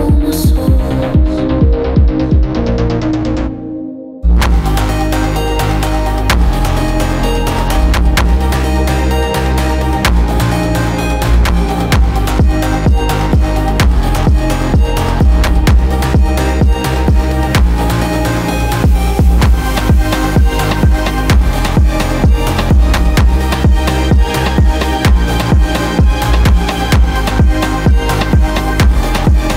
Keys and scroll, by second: 0.1 Caps_Lock, 1.8-4.3 typing, 16.4 ctrl+g, 19.0 space, 22.3 space, 25.5 space, 27.1 space.